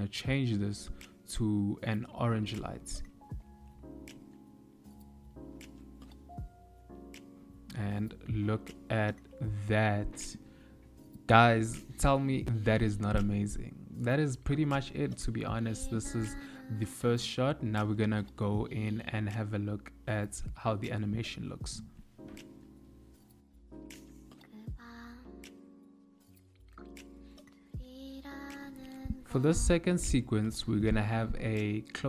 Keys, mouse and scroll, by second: 2.0 click.